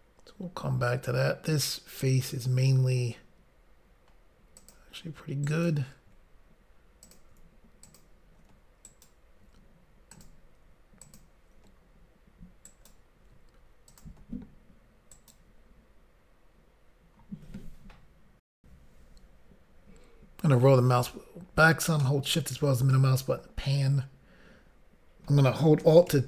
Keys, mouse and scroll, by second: 4.6 click, 5.5 ctrl+right click, 7.2 click, 7.9 shift+click, 8.9 ctrl+right click, 10.2 click, 11.1 shift+click, 14.0 click, 15.2 ctrl+right click, 18.5 Insert, 20.3-21.5 scroll down 1, 22.0 shift+middle click, 26.1 alt+a.